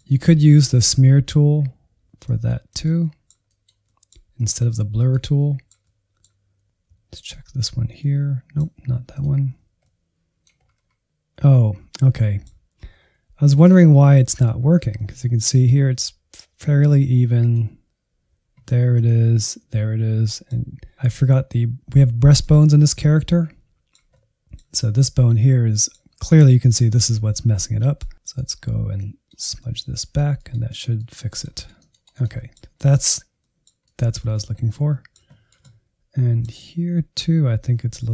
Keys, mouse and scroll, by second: 0.1 click, 0.8 middle click, 0.9 click, 1.1 middle click, 1.2 click, 1.6 middle click, 2.1 alt+z, 2.2 click, 2.5 middle click, 2.9 alt+z, 3.4 click, 3.7 middle click, 3.9 click, 4.2 middle click, 4.4 click, 4.7 middle click, 4.8-5.1 scroll down 1, 5.1 middle click, 5.4 click, 5.6 scroll up 1, 5.7 middle click, 5.8 click, 6.3 middle click, 6.6 alt+z, 6.9 ctrl+click, 7.1 middle click, 7.6 middle click, 7.8 scroll up 2, 7.9 middle click, 8.5 ctrl+click, 8.5 middle click, 9.8 click, 10.5-10.8 scroll down 3, 11.0 ctrl+click, 11.4-13.8 middle drag, 13.8 ctrl+click, 14.4 ctrl+click, 14.7-17.3 middle drag, 17.3-18.7 ctrl+drag, 19.6-20.9 middle drag, 20.9 ctrl+click, 21.3-28.2 middle drag, 28.2-29.7 drag, 29.7 middle click, 29.9 click, 30.3 middle click, 30.5 click, 30.7 middle click, 30.9 click, 31.1 alt+z, 31.2 middle click, 31.3 click, 31.6 middle click, 31.8 click, 32.3 middle click, 32.7 click, 33.3 middle click, 33.8 click, 34.2 middle click, 34.5 scroll up 1, 34.9-36.1 middle drag, 36.1-36.4 scroll up 1, 36.7 click, 36.9 middle click, 37.2 click, 37.4 scroll down 3, 37.7-38.1 drag.